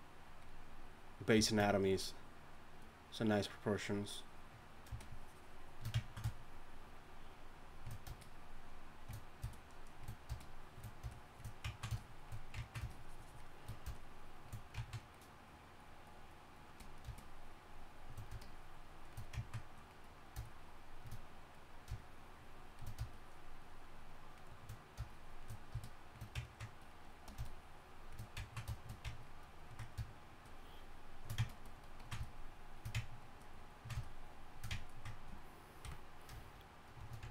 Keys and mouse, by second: 35.8 KP_1.